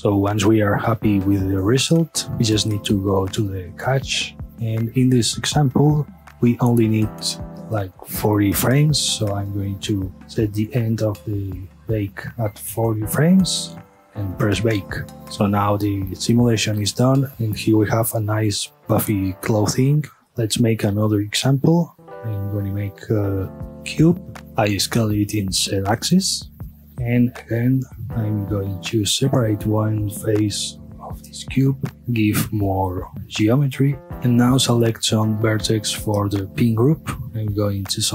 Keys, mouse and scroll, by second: 0.6 scroll up 2, 0.7-2.3 middle drag, 2.3 click, 3.7-4.4 drag, 9.0 space, 9.2-10.4 middle drag, 10.4-12.8 drag, 12.8 KP_Enter, 14.4 click, 20.4 space, 20.8-22.0 middle drag, 22.0 shift+a, 24.4 scroll down 1, 24.4 Tab, 24.8 s, 26.8 scroll up 1, 27.1 s, 27.9 Escape, 28.6 3, 28.8 click, 29.4-30.8 middle drag, 30.8 shift+d, 31.7 right click, 32.0-34.0 middle drag, 34.0 ctrl+r, 34.3 Tab, 34.6-35.0 scroll up 1, 35.0 1, 35.4-35.8 middle drag, 35.8 a, 36.2-37.6 scroll up 1.